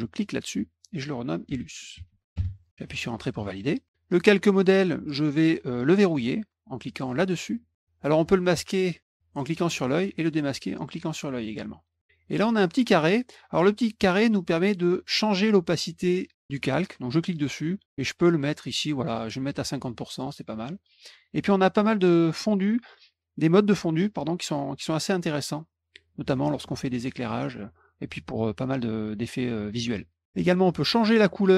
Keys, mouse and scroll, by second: 0.1 click, 1.1-2.5 typing, 3.8 click, 7.5 click, 9.0 click, 10.0 click, 16.5 click, 17.8-20.1 drag, 30.1 click.